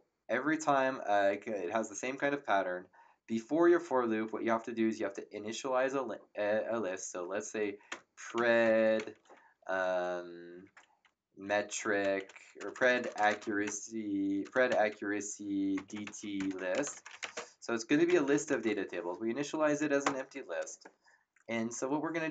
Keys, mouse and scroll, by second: 7.6-9.4 typing, 11.2-18.9 typing, 20.0 Return.